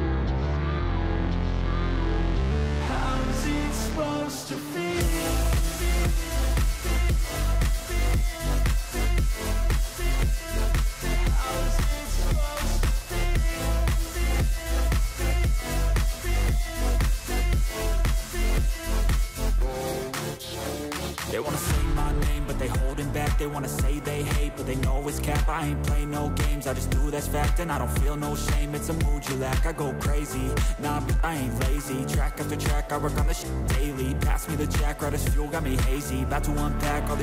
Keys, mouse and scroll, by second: 2.5 ctrl+z, 3.9 ctrl+z, 5.0 ctrl+z, 6.4 ctrl+z, 8.5 scroll down 1, 11.8 ctrl+z, 15.4 click, 21.5 ctrl+z, 27.2-28.3 scroll down 1, 36.5 ctrl+z.